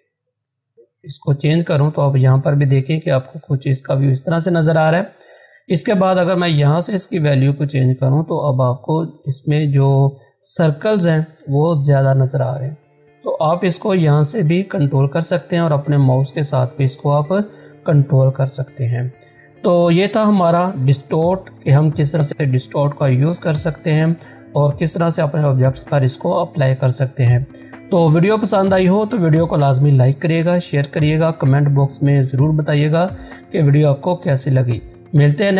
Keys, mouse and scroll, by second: 3.3 click, 8.5 click.